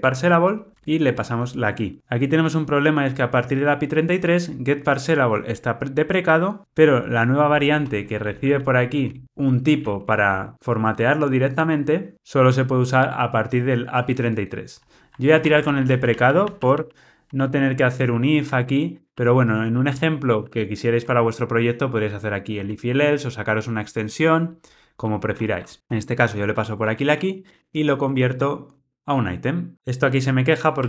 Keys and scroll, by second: 0.7 Tab, 11.6 Tab, 15.5 super+z, 16.5 super+z, 17.3 super+z, 18.0 super+z, 18.5 super+z, 19.0 super+z, 19.7 shift+super+z, 20.3 shift+super+z, 28.8 Tab, 29.7 super+z.